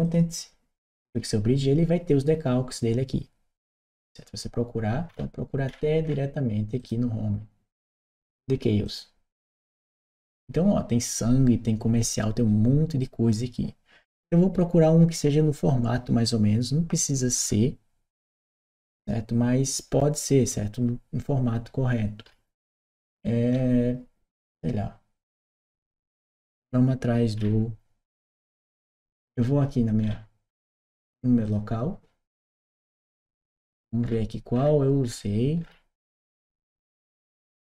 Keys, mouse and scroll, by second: 0.8 click, 4.9-5.4 scroll down 1, 5.4 scroll down 1, 5.5-6.0 scroll up 1, 6.6 click, 8.6 click, 14.3-14.8 scroll down 2, 17.1-18.4 scroll down 2, 18.4-19.5 scroll down 1, 22.0-23.3 scroll down 2, 23.3-23.6 scroll up 2, 27.1-28.7 scroll down 2, 29.8 scroll down 2, 30.5 scroll down 2, 31.2 click, 32.8-34.2 scroll down 2, 34.2-36.5 scroll down 1, 36.5 scroll down 1, 36.6 scroll up 2, 36.8 middle click.